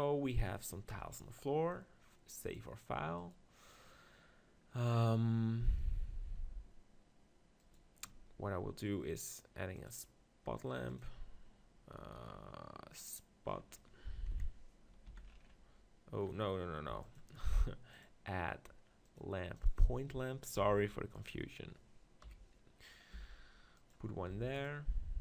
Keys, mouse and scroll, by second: 0.9 KP_0, 2.7-4.3 drag, 4.3-6.6 middle drag, 7.6-10.0 drag, 14.3 KP_7, 15.1 z, 16.9 x, 18.1-19.8 drag, 20.6 g, 21.2-23.0 drag, 22.2 KP_1, 23.1 g, 24.3 g, 24.6-25.2 drag.